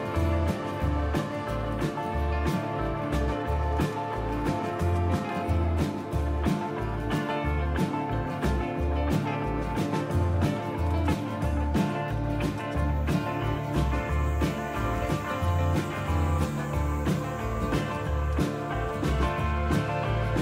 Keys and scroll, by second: 2.8-7.1 typing, 10.4-12.8 typing, 15.7 typing, 17.0-18.2 typing, 18.2 Return.